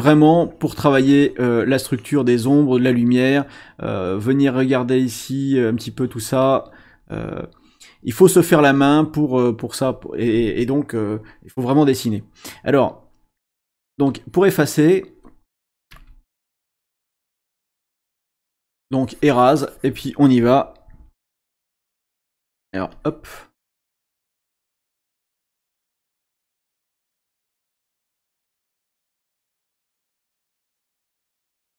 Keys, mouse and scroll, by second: 0.4-3.2 drag, 3.9-7.5 drag, 12.7 click, 14.1-15.3 shift+scroll up 1, 15.9 e, 16.4-20.1 drag, 21.2 s, 21.4 click, 22.9 shift+click, 24.2-25.9 shift+drag, 26.8-31.7 shift+drag.